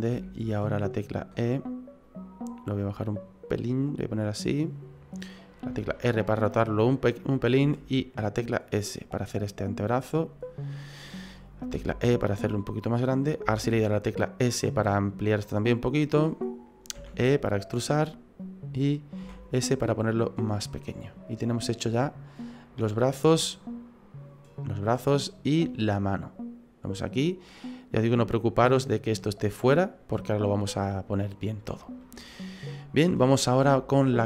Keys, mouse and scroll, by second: 0.1 e, 2.8 click, 4.1 click, 5.7 r, 7.6 s, 9.8 click, 11.7 e, 13.4 s, 16.9 e, 19.2 s, 23.1-25.7 scroll down 2, 25.7 middle click, 25.7 scroll down 1, 30.5 middle click, 32.0 middle click, 33.3-33.7 scroll up 4, 33.7 shift+middle click.